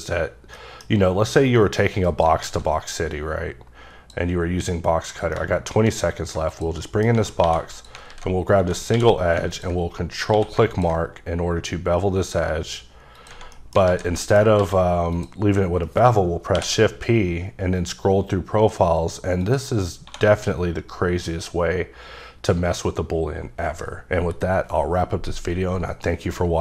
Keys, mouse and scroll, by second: 0.6 middle click, 1.6 click, 2.1 right click, 2.4 alt+w, 3.1 click, 5.3 middle click, 6.5 shift+click, 6.9 middle click, 7.4 2, 7.8 click, 8.1 alt+z, 9.0 q, 9.5 ctrl+click, 10.3 q, 10.8 ctrl+click, 11.4-12.6 scroll up 11, 13.2 click, 13.6 middle click, 13.9 alt+z, 14.2 middle click, 14.6 q, 15.2 click, 16.6 shift+p, 17.2-19.4 scroll up 4, 19.4 click, 20.1 1, 20.5 middle click.